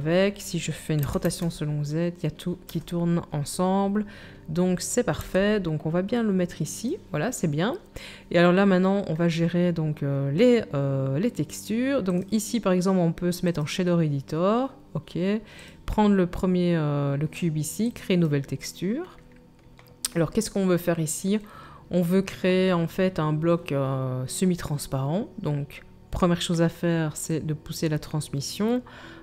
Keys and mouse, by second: 1.0 r, 5.1 g, 12.1-29.2 middle drag, 12.1-19.7 right drag.